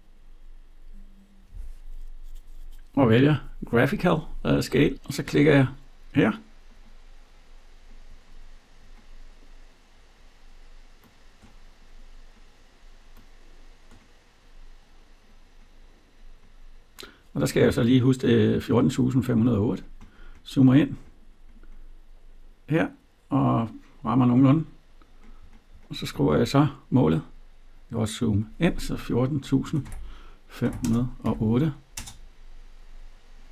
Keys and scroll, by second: 31.8 Return.